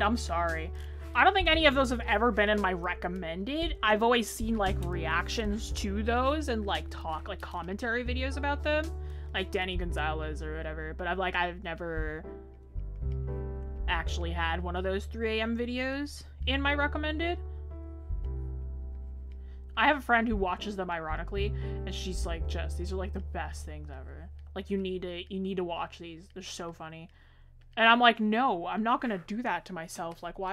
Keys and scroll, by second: 22.5 ctrl+z.